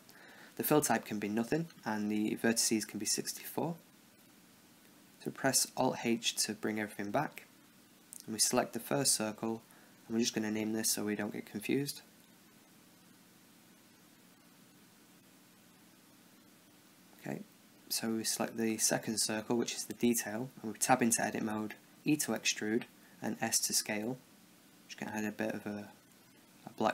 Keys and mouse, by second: 1.3-2.5 drag, 4.6 t, 6.3 alt+h, 7.1-8.5 right drag, 9.0-10.5 right drag, 10.5 n, 12.0-14.4 drag, 15.6-17.0 drag, 17.1 n, 19.0-20.5 drag, 20.5 Tab, 21.7 e, 23.4 s.